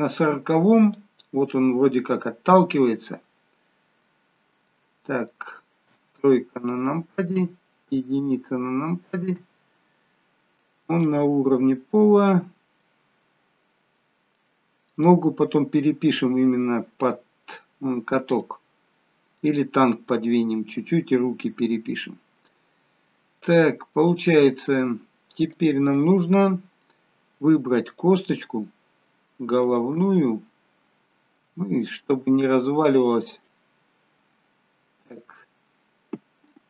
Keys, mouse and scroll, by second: 2.0 middle click, 5.9 middle click, 5.9 KP_3, 7.4 KP_1, 8.4 KP_1, 9.4 KP_3, 11.1 middle click, 13.5-14.0 scroll up 4, 14.0-14.4 scroll down 2, 14.4 middle click, 15.5-16.7 scroll down 1, 18.4 middle click, 23.6 middle click, 23.6 click, 25.0-25.7 scroll down 1, 25.7 click, 26.1 middle click, 27.9 click, 29.7 shift+click, 30.3-31.1 scroll up 7, 31.7-32.7 scroll up 2, 32.0 middle click, 32.7-33.3 scroll down 1, 33.6 middle click, 33.6-34.5 scroll down 1.